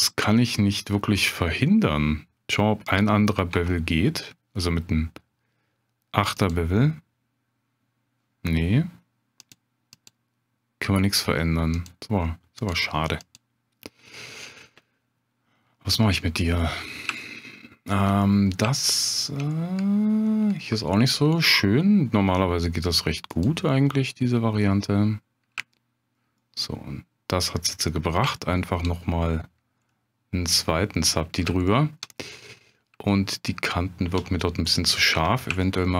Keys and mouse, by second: 3.0 click, 3.5 Tab, 9.5-11.7 drag, 11.7 click, 17.2-18.0 shift+drag, 18.3 drag, 18.8-19.4 shift+drag, 23.3 click, 25.7-26.2 shift+drag, 26.4-27.4 shift+drag, 28.4-28.7 shift+middle drag, 29.9-30.4 middle drag, 31.7 shift+middle drag, 33.1-34.1 shift+middle drag, 35.2 Tab, 35.6 shift+click.